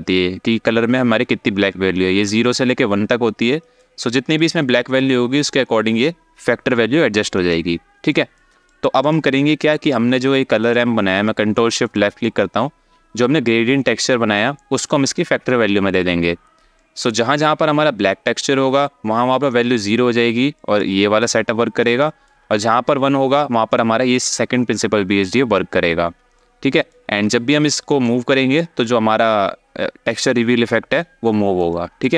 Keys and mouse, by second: 4.0 click, 5.2-7.0 drag, 8.0 alt+shift+middle click, 11.6 ctrl+shift+click, 16.5 alt+shift+middle click, 20.3 alt+shift+middle click, 21.7 alt+shift+middle click, 26.1 alt+shift+middle click, 27.0 alt+shift+middle click, 27.7-29.8 drag, 31.4 alt+shift+click.